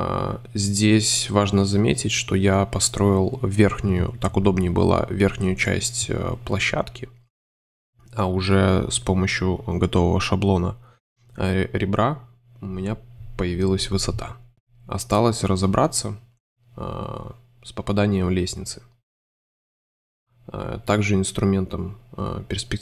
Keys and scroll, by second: 2.0 super+c, 2.4 space, 8.3 super+y, 9.2 super+y, 10.7 c, 11.2 super+c, 15.5 i, 16.2 shift+i, 20.3 super+z, 20.5 super+i.